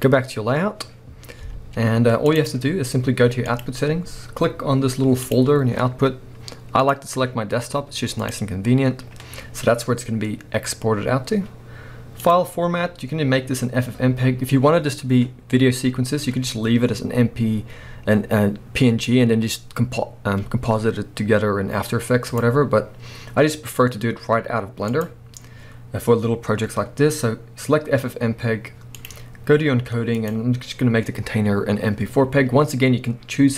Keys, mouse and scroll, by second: 0.0 click, 1.2 scroll down 1, 1.5 z, 5.4-33.5 drag.